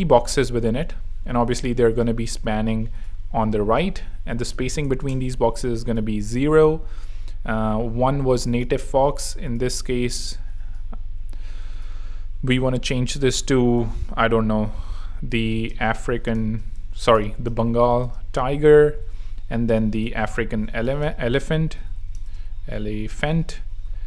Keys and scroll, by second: 0.1 super+d, 4.8 0, 5.0 Home, 10.1 ⟲, 14.4 shift+super+a, 14.7-23.9 typing, 16.9 alt+space, 17.0 alt+BackSpace, 20.0 super+a.